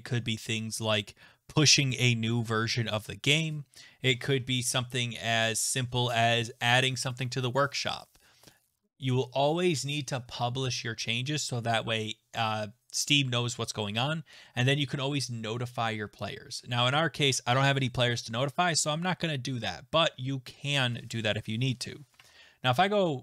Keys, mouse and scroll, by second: 22.2 alt+Tab.